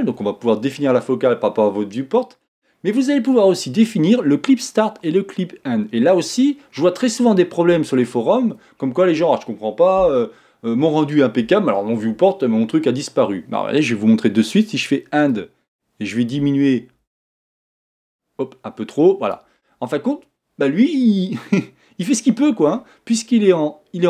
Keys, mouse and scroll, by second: 15.3-18.3 drag, 20.8-23.8 middle drag.